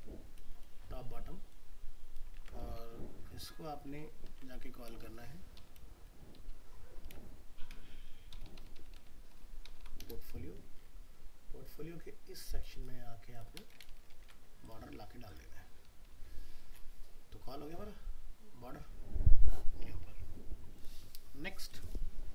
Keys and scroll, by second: 2.3 ctrl+c, 4.3 ctrl+f, 13.8 ctrl+v, 14.1 ctrl+s.